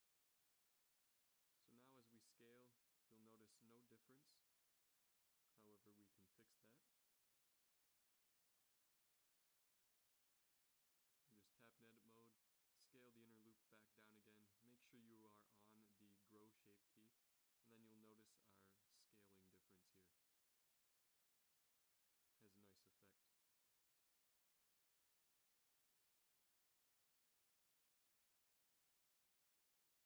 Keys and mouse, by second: 2.2 s, 10.9 click, 11.3 Tab, 12.4 s, 15.9 Tab, 17.0 s.